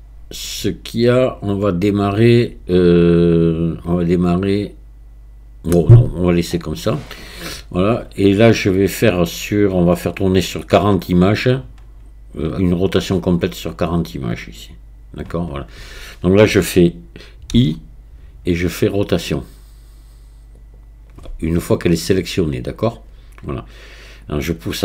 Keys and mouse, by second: 17.6 i, 24.3-24.8 drag.